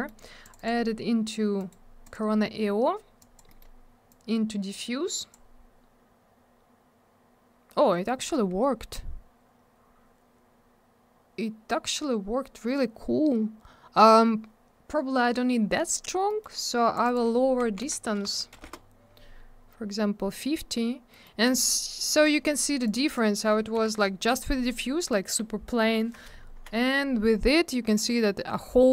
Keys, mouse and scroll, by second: 0.1 middle click, 0.4 click, 0.5 double click, 0.6 click, 0.7 click, 1.6 right click, 1.7 right click, 2.0 click, 2.1 click, 3.2 click, 3.4 click, 3.5 middle click, 3.6 middle click, 4.1 click, 9.8-11.1 scroll down 1, 13.0 scroll up 1, 13.9-14.4 scroll down 1, 16.3 middle click, 16.4 middle click, 16.9 click, 17.0 click, 17.1 click, 17.1 click, 17.6 5, 18.2 BackSpace, 18.5 0, 18.6 Return, 19.7-20.1 scroll up 1, 21.1 middle click, 21.2 middle click, 21.4 click, 21.6 click, 22.0 click, 22.9 click, 23.8 Delete, 26.4 ctrl+z, 27.6 scroll up 1.